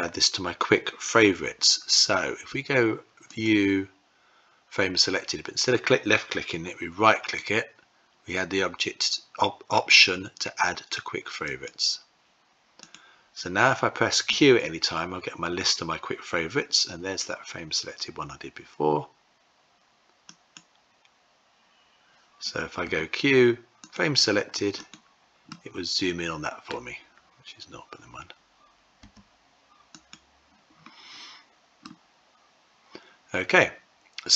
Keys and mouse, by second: 3.2-12.1 drag, 14.1 q, 22.6 q, 24.6 click, 25.4-26.5 middle drag, 28.8 q, 31.6-34.3 middle drag.